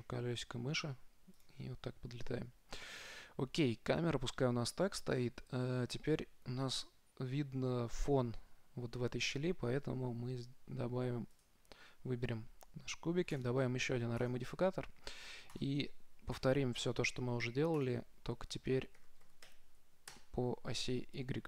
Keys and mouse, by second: 11.6-13.4 right drag, 13.6-15.5 drag, 15.8-17.6 drag, 18.0-19.9 drag.